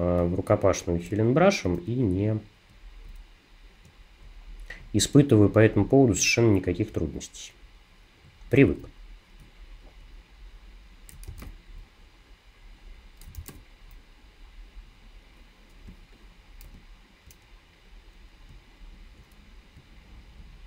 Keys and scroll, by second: 11.3 super+r, 13.4 super+r, 15.9 space, 16.6 alt+space.